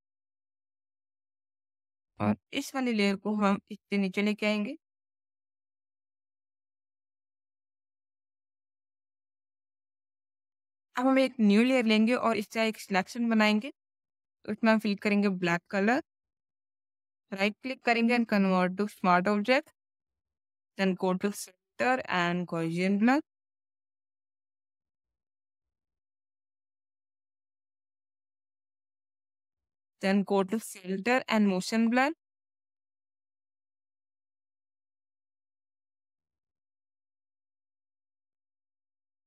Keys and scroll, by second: 7.6 space, 15.3 alt+BackSpace, 15.9 ctrl+alt+BackSpace, 16.1 ctrl+alt+d, 26.0 ctrl+z, 27.4 Down, 27.5 Down, 28.7 Up.